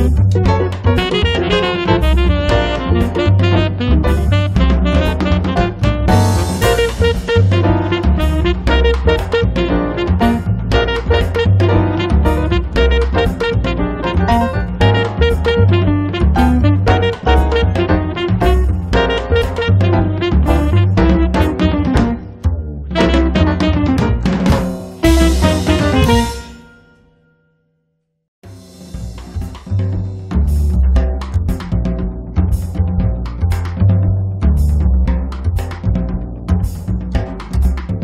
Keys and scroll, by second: 18.3-20.8 typing, 25.2 space, 25.8 Escape.